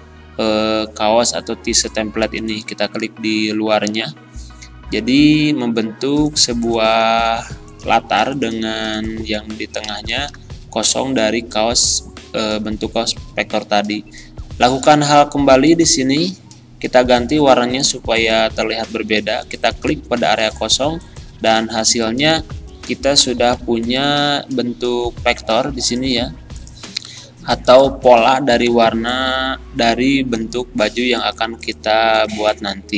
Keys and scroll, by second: 9.9 Caps_Lock, 23.6 Delete, 26.1 Delete, 28.7 z.